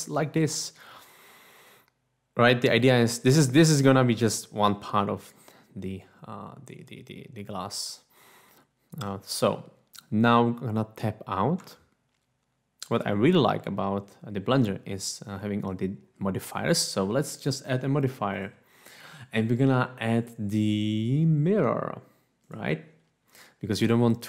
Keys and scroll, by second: 11.6 Tab.